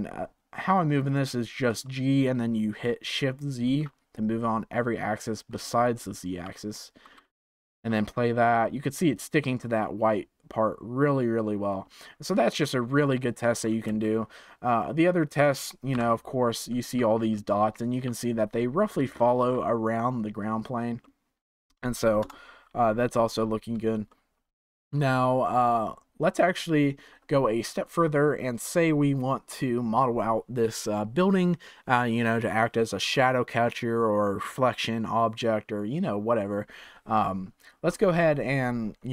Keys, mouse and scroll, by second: 1.8-4.8 shift+middle drag, 5.2-5.9 scroll up 3, 5.9-7.1 shift+middle drag, 7.1 space, 14.0 space, 14.7-15.9 middle drag, 15.9 KP_1, 17.1 scroll up 4, 17.4-21.7 shift+middle drag, 21.7-22.2 scroll down 2, 22.2 KP_0, 23.0-24.0 scroll down 8, 24.0-27.2 shift+middle drag, 37.6-39.1 scroll up 1.